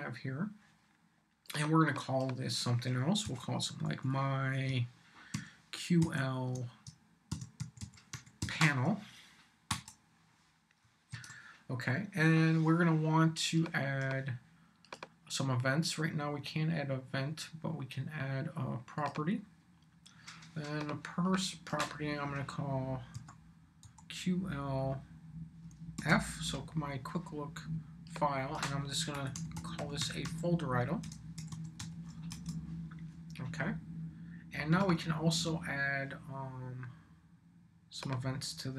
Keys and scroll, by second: 3.2-6.0 typing, 7.1-8.9 typing, 9.7 Return, 11.1 super+s, 23.1 p, 23.8 l, 25.9 shift+f, 28.9-32.3 typing, 32.3 Return.